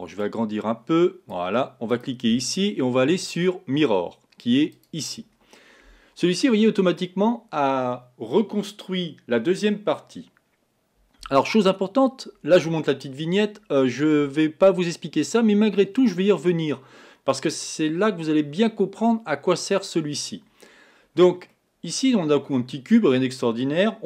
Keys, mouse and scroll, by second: 0.3-14.7 drag, 21.5-24.0 middle drag.